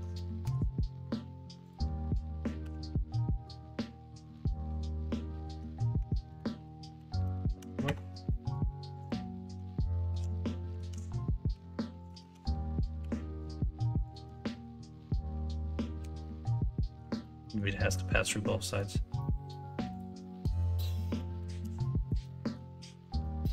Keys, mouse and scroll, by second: 0.4 ctrl+KP_Subtract, 2.6 h, 3.3 middle click, 3.7-4.3 middle drag, 5.0-5.4 middle drag, 5.4 Tab, 6.0 Tab, 6.3-8.0 ctrl+z, 8.2 middle drag, 9.0 click, 10.1 h, 10.8 ctrl+z, 11.5 g, 12.2 ctrl+z, 13.0 h, 14.3 middle drag, 16.0 ctrl+KP_Subtract, 16.8 middle click, 17.1 ctrl+z, 17.4 middle click, 17.8 middle drag, 18.2 middle click, 19.1-19.5 middle drag, 20.9 middle click, 21.7-22.0 middle drag, 22.2-22.5 middle drag, 23.2 middle click.